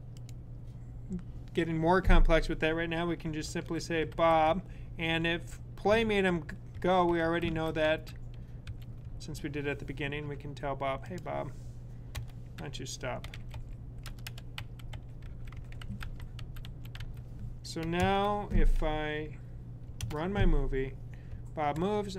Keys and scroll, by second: 3.7-5.0 typing, 6.4-8.8 typing, 12.9-17.5 typing, 21.2 Left.